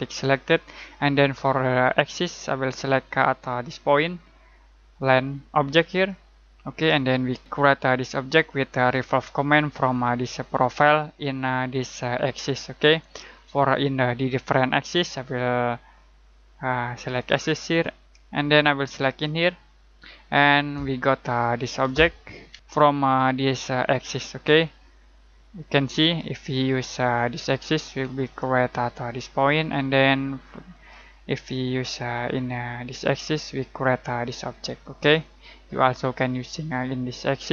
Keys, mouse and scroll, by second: 3.4-5.4 scroll down 1, 5.8 click, 7.0-7.4 scroll up 1, 17.1 click, 19.2 click, 21.5 scroll down 1, 21.9-22.5 scroll up 1, 26.0 click, 27.0-27.9 scroll down 1, 28.2 click, 30.7 click, 33.9 scroll down 1, 33.9 scroll up 1.